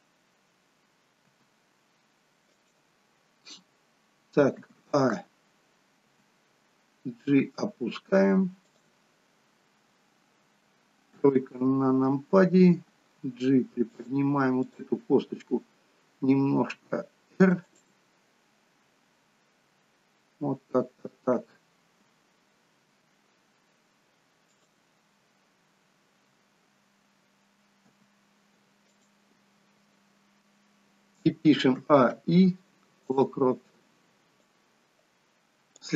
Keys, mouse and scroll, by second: 1.3 g, 2.9 click, 4.6 a, 6.1 g, 11.3 KP_3, 13.4 g, 14.8 click, 16.9 r, 22.9 g, 26.3 a, 28.1 g, 31.8 a, 32.2 i, 34.6 click.